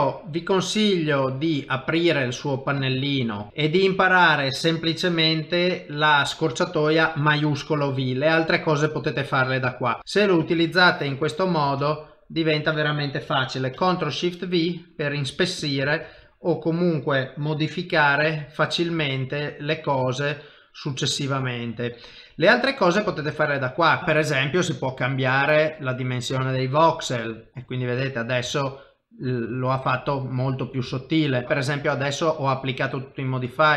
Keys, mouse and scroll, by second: 0.2 click, 3.5 click, 3.5 middle click, 6.5 click, 6.8 middle click, 9.5 middle click, 10.0 middle click, 10.0 shift+v, 10.6 shift+v, 10.8 click, 11.9 shift+v, 12.1 middle click, 13.8 ctrl+shift+v, 14.7 middle click, 15.6 click, 16.1 ctrl+shift+v, 21.9 middle click, 23.2 shift+click, 23.6 middle click, 24.0 ctrl+z, 24.0 click, 27.4 click, 27.8 middle click, 28.6 ctrl+middle click, 30.7 ctrl+z, 31.4 click, 33.7 click.